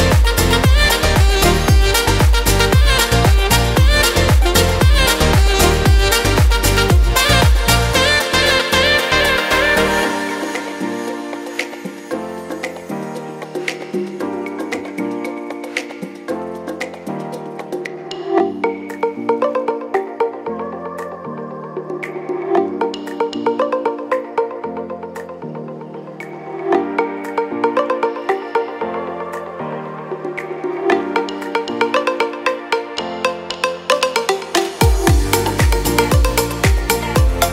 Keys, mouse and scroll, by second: 4.9 alt+w, 5.7 alt+w, 9.6 click, 10.8 w, 12.3 click, 13.6 click, 22.1 alt+w, 22.6 alt+w, 31.2 t.